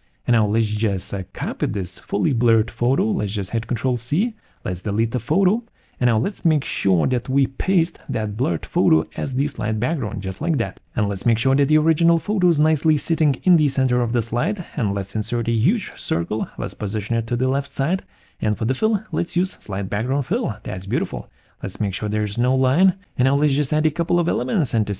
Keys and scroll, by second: 1.0 0, 1.2 Return, 4.5 ctrl+c, 5.9 Delete, 21.9 alt+3.